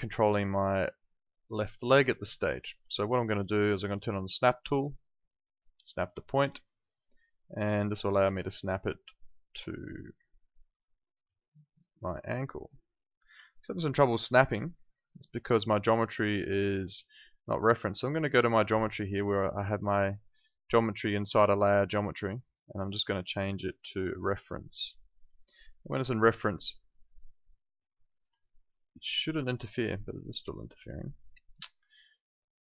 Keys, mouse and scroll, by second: 2.4 alt+middle click, 6.2 click, 9.7 alt+click, 10.2 alt+middle click, 10.8 alt+right click, 11.8 click, 13.4 alt+click, 19.3 click, 25.0 alt+click, 28.4 alt+click, 29.2 alt+middle click, 29.6 alt+click.